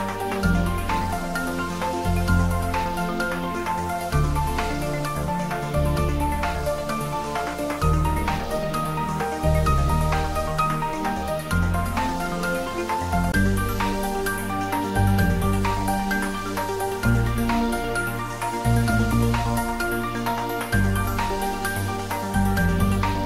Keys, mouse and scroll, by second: 12.7-13.2 scroll down 1, 14.3 click, 14.9-16.0 scroll down 1, 16.4 ctrl+s, 18.5 click, 19.4 scroll down 1, 20.1 click, 20.4 scroll down 1, 21.0 middle click, 22.3-23.0 scroll up 1, 23.0 Tab.